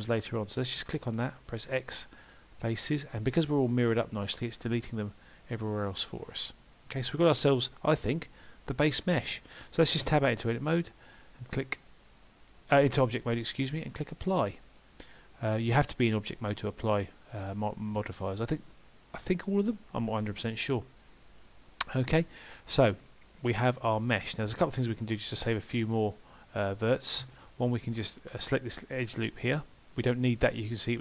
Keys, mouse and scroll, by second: 0.5 click, 1.7 x, 2.7-3.5 scroll down 3, 3.2 middle click, 10.1 Tab, 14.4 click, 23.3 middle click, 25.5 alt+click, 27.3 2, 28.1 click, 28.7 alt+click, 29.5 middle click, 30.0 middle click.